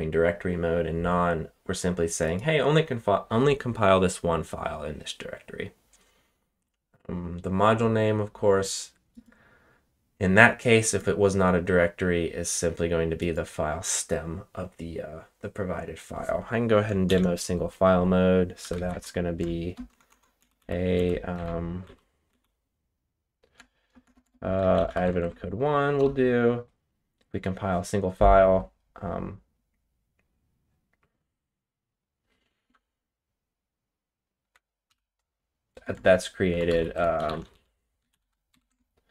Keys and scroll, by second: 17.0 ctrl+shift+k, 18.3-19.7 typing, 20.3 Up, 20.5 Up, 20.9 Up, 21.3 Down, 21.8 Up, 22.2 Up, 23.5-25.5 typing, 25.9 Return, 34.4-39.1 typing.